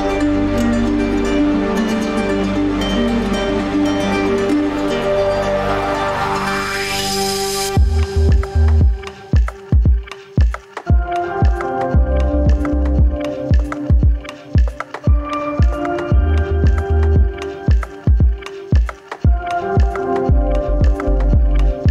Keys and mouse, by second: 0.2-0.8 middle drag, 4.1-6.7 middle drag, 7.2 shift+middle drag, 9.3-9.9 middle drag, 10.2-11.4 middle drag, 16.8 shift+middle drag, 17.9 Tab, 19.5 click, 20.0 g.